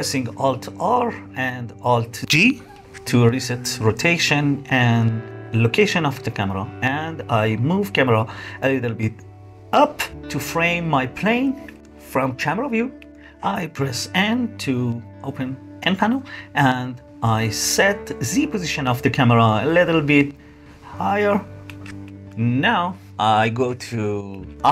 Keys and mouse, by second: 0.0 click, 0.1-1.0 middle drag, 2.2 alt+r, 3.1 alt+g, 3.9-4.5 drag, 4.5-5.0 middle drag, 6.2 middle click, 11.0-12.2 middle drag, 12.6 KP_0, 13.8 n, 14.9 middle click, 17.6-22.6 middle drag, 23.5 middle click.